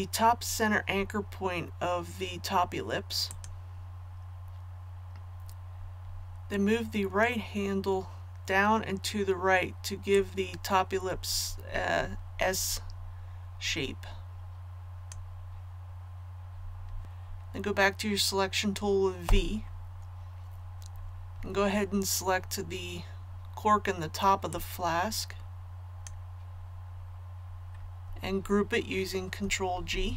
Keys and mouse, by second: 3.2-15.5 drag, 17.0 a, 19.2 v, 24.5-26.4 drag.